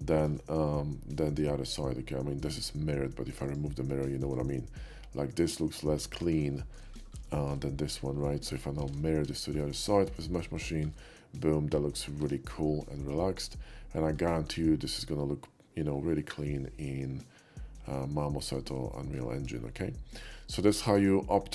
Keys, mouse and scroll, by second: 0.2 shift+middle click, 1.7 shift+middle click, 3.5 click, 4.1 shift+middle click, 5.6 shift+middle click, 5.9 shift+middle click, 6.4 shift+middle click, 7.3 shift+middle click, 7.9 shift+middle click, 8.3 shift+middle click, 9.4 shift+middle click, 9.6 alt+shift+x, 9.8 shift+middle click, 10.7 middle click, 12.3 Tab, 12.7-14.2 middle drag, 16.2-18.6 middle drag, 19.0 shift+middle drag, 19.5 KP_5, 20.3-21.5 middle drag.